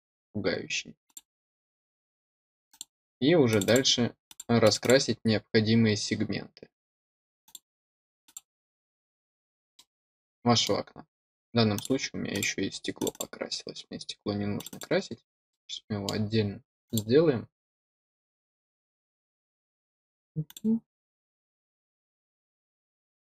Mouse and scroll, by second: 1.0 click, 2.6 click, 3.4 click, 4.2 click, 4.6 click, 4.7 click, 7.4 click, 8.2 click, 9.7 middle click, 11.7 click, 12.3 click, 12.9 click, 13.0 click, 14.5 click, 14.6 click, 15.4-16.0 middle drag, 16.8 click, 20.4 click.